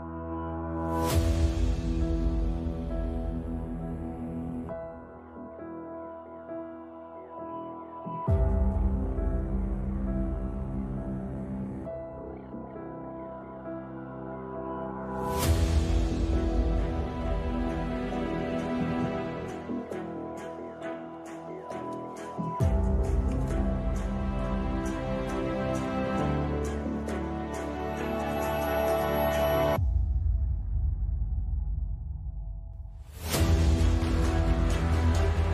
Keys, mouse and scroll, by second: 0.3 b, 0.5 z, 0.7 b, 1.5 z, 2.1 shift+right click, 3.0 z, 3.7 ctrl+z, 4.6 e, 7.8 middle click, 8.1 KP_5, 9.0 middle click, 9.7 Tab, 10.8 KP_Decimal, 11.9 KP_Decimal, 12.6 KP_5, 14.5 middle click, 15.3 middle click, 15.8 alt+c, 16.7 z, 17.7 Tab, 18.1 space, 19.9 click, 19.9 z, 20.6 Tab, 20.9 x.